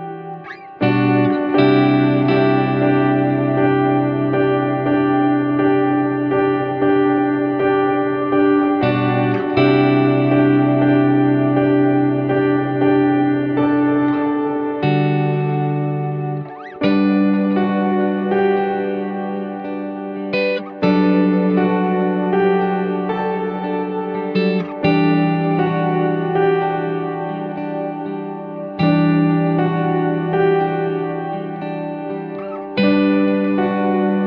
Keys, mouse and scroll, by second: 1.3-6.5 drag, 7.4 click, 17.0 click, 19.4 click, 19.8 click, 20.3 click, 21.0 click, 21.8 click, 22.4 click, 22.6-28.2 drag, 29.0-29.5 scroll down 2, 29.5-30.0 middle drag, 30.6 shift+a.